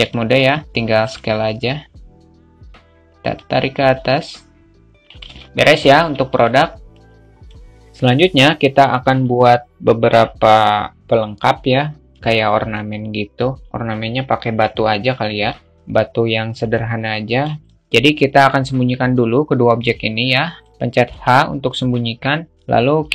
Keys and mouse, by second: 0.7 alt+shift+middle click, 4.0-5.6 drag, 5.6 middle click, 5.9 alt+z, 7.7 click, 15.2-17.2 drag, 19.6-20.4 drag.